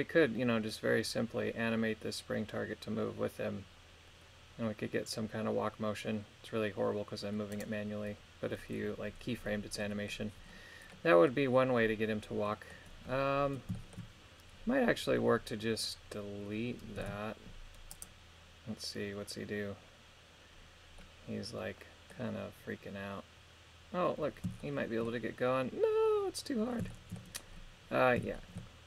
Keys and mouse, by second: 7.6-9.1 right drag, 9.8 middle click, 11.0 middle click, 12.5 middle click, 13.8 shift+middle click, 17.1 x, 21.0-22.2 middle drag, 24.6 shift+middle click, 26.9 shift+middle click, 28.4 shift+middle click.